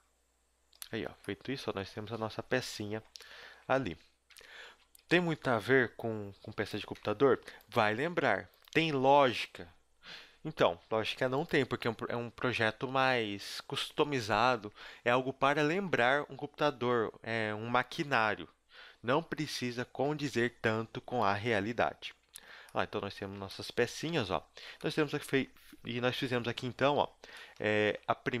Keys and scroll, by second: 0.8 Tab, 2.4 KP_1, 4.0 Tab, 4.3 Tab, 4.6 Tab, 5.0 z, 5.6 b, 7.0 ctrl+Tab, 7.8 g, 8.9 g, 21.9 z, 23.4 Tab.